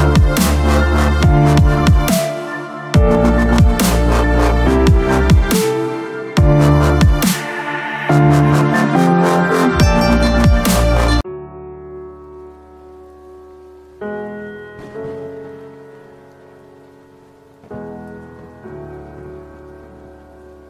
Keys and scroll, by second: 0.0 ctrl+alt+shift+e.